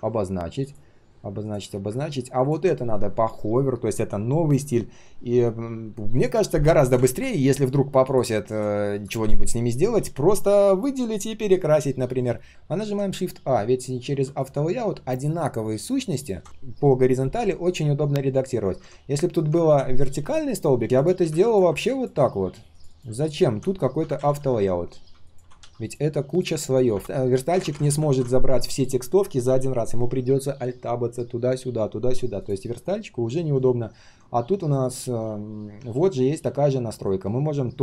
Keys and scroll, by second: 23.0 ctrl+c, 24.3 ctrl+v, 25.3 ctrl+a, 25.5 ctrl+c, 27.0 ctrl+a, 27.8 ctrl+v, 28.0 ctrl+a.